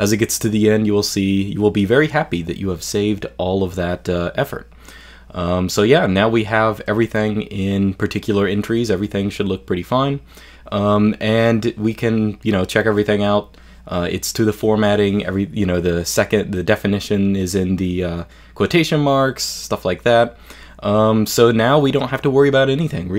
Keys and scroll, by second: 2.6-3.5 typing, 4.3 ctrl+u, 4.5 ctrl+u, 4.7 ctrl+u, 5.0 ctrl+u, 5.2 ctrl+u, 5.2 typing, 6.0 shift+super+space, 6.3-12.5 typing, 9.2 super+l, 10.9 super+l, 17.6 typing, 18.9 super+f, 19.1 typing.